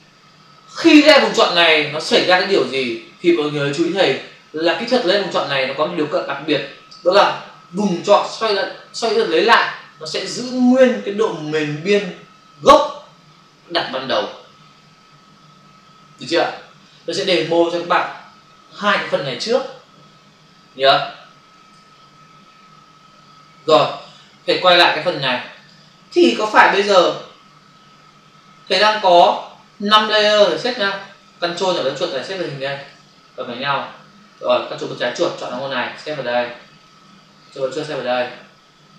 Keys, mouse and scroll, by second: 21.7 alt+Tab, 25.5 click, 26.8 f, 29.6 v, 30.5 ctrl+click, 31.4 ctrl+double click, 32.0 click, 33.0 click, 33.1 click, 35.0 ctrl+click, 35.5 click, 37.3 ctrl+click.